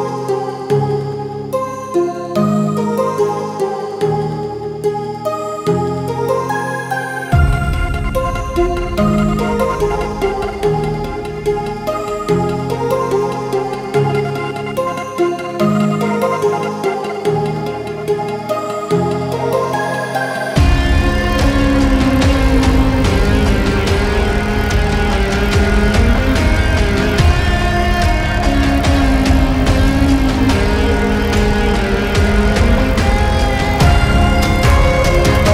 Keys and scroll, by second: 9.6 ctrl+z.